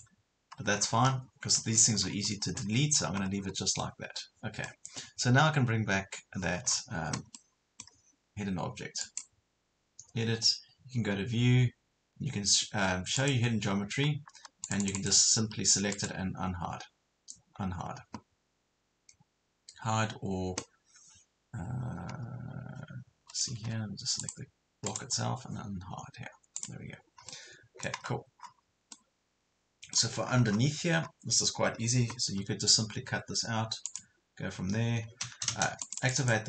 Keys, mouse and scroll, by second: 0.8 scroll down 1, 1.6 Escape, 2.0 scroll up 1, 2.6 middle click, 3.4 scroll down 1, 3.8 middle click, 6.7 scroll down 1, 7.4-8.5 middle drag, 9.0 click, 15.3 click, 15.9 right click, 23.1 Escape, 24.2 click, 24.9 right click, 26.6 click, 27.3 middle click, 28.1 scroll up 1, 28.9 middle click, 30.3 scroll down 1, 30.4 scroll up 1, 30.5 scroll down 1, 30.9 scroll up 1, 31.7 scroll down 1, 32.4 scroll down 1, 33.9 click, 35.5 space, 35.9 click.